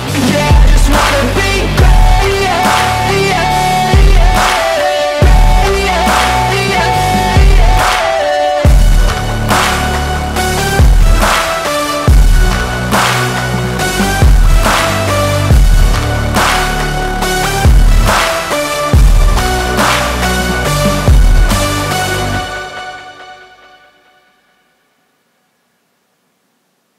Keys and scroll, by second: 5.4 F2, 9.2 Escape, 9.8 F3, 11.9 ctrl+z, 13.7 F3, 14.2 Escape, 18.8 Escape, 19.2 F3, 19.6 Escape, 23.0 shift+F2, 24.5 F9, 24.9 F9.